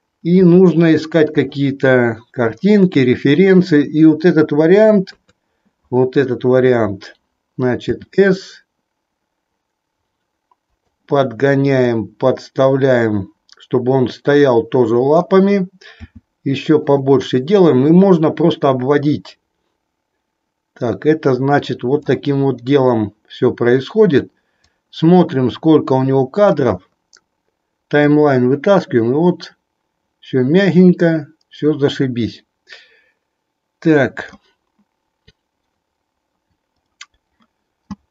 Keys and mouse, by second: 0.3 r, 3.2-5.0 drag, 5.0 KP_3, 7.8 s, 10.7-15.2 drag, 16.0 s, 18.9-34.3 drag.